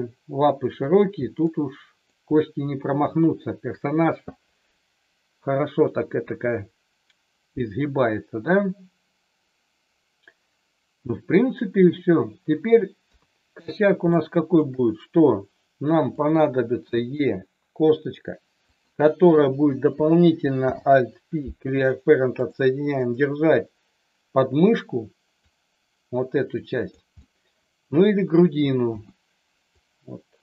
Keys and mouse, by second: 1.3 middle click, 2.3 middle click, 13.1 KP_3, 14.2 shift+middle click, 16.8 e, 18.7 click, 20.5 alt+p, 22.9-24.8 drag, 25.4-26.9 drag, 27.2 middle click, 28.8 KP_1, 29.7-30.4 drag.